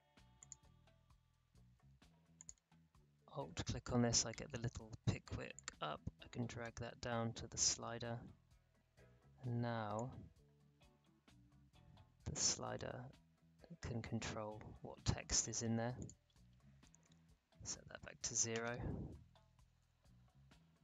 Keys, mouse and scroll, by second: 2.3 alt+click, 5.5-9.9 drag, 9.9-15.9 drag, 17.0 1, 18.3 0, 18.5 Return.